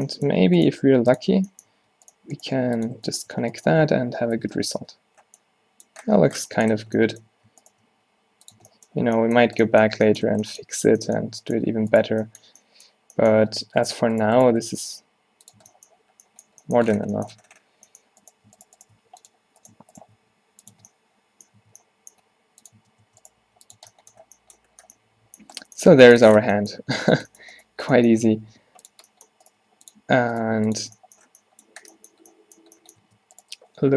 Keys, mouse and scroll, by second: 0.7 click, 0.8 g, 1.4 Tab, 1.8 Tab, 2.6 g, 4.5 f, 4.6 f, 4.9 Tab, 6.8 Tab, 8.0 g, 8.7 Tab, 9.6 middle click, 10.7 Tab, 13.5 Tab, 13.7 Tab, 15.0 g, 15.7 Tab, 17.0 Tab, 19.1 g, 20.2 g, 20.8 Tab, 21.7 Tab, 22.3 g, 22.9 Tab, 23.1 Tab, 23.5 g, 23.9 Tab, 26.4 Tab, 28.5 g, 29.7 g, 30.5 g, 30.9 Tab, 33.1 Tab.